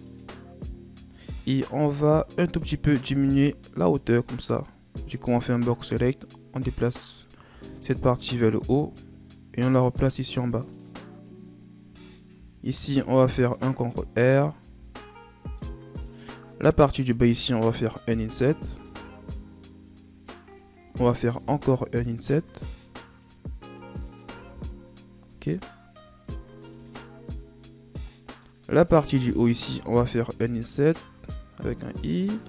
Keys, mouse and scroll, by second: 0.6-2.4 scroll down 13, 2.5 right click, 3.1 b, 5.4-7.4 drag, 7.4 a, 7.9 a, 8.9-11.9 drag, 12.3 ctrl+r, 14.5 z, 14.9 middle click, 15.9-16.7 scroll up 1, 16.7 alt+right click, 18.1 i, 24.3 KP_1, 25.5-26.9 scroll up 6, 26.9-28.0 scroll up 3, 28.0 middle click, 28.5-29.1 scroll up 2, 29.3 alt+right click, 30.4 i.